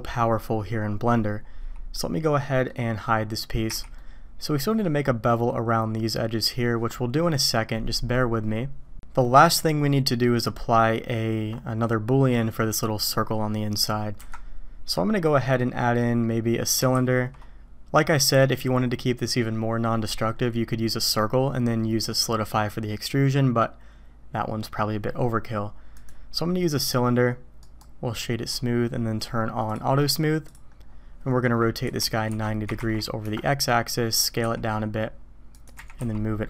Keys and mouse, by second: 1.9-2.7 middle drag, 3.7 h, 3.9-4.3 drag, 4.3-4.8 middle drag, 9.5 middle click, 13.0 middle click, 14.2 KP_1, 16.9 shift+a, 27.8 right click, 29.7 click, 30.5 click, 31.8 r, 34.4 s, 35.7 g.